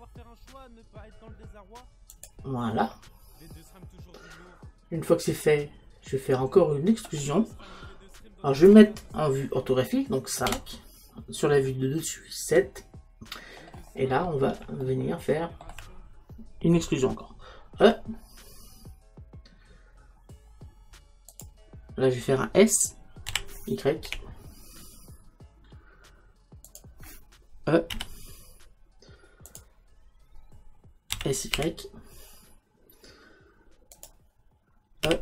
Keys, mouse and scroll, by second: 2.3 click, 2.9-4.6 middle drag, 10.5 KP_5, 13.6-16.8 middle drag, 13.6 KP_7, 17.9 e, 21.5 click, 23.3 s, 26.8 click, 28.0 e, 29.6 click, 31.5 s, 34.1 click, 35.1 e.